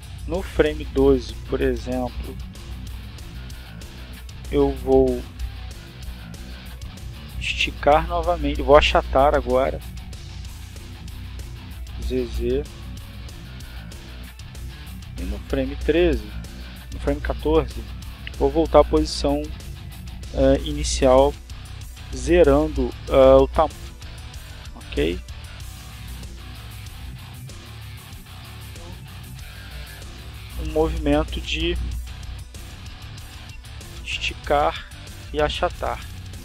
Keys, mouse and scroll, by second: 1.7 click, 7.1 s, 13.4 z, 15.5 click, 16.7 click, 24.2 alt+s, 26.7-30.2 drag, 30.5 click, 31.0 scroll down 2, 32.0 scroll down 2, 33.1-33.6 drag.